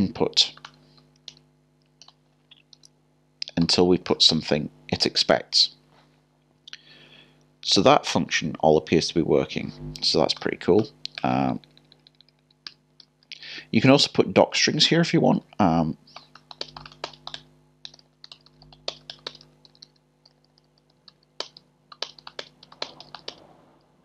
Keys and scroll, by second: 2.0 typing, 3.4-4.1 typing, 17.9 typing.